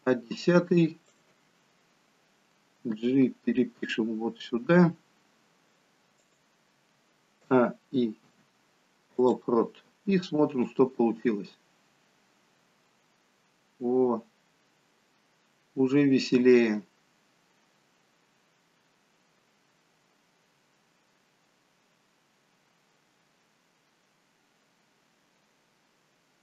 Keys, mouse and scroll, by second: 2.9 g, 7.6 a, 8.3 i, 10.7 click.